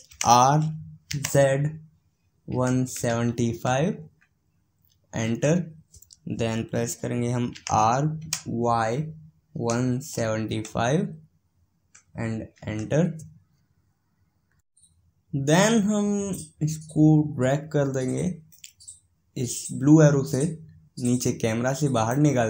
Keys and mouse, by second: 19.3-21.1 drag.